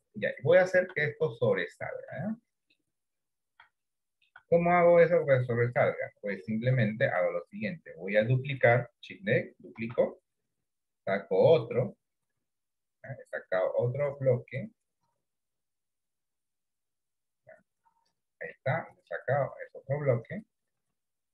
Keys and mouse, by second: 0.0 shift+middle click, 2.2 middle click, 3.8 shift+middle click, 5.1 middle click, 6.5 shift+middle click, 7.7 middle click, 10.0 shift+d, 18.6 middle click, 20.5-21.3 drag.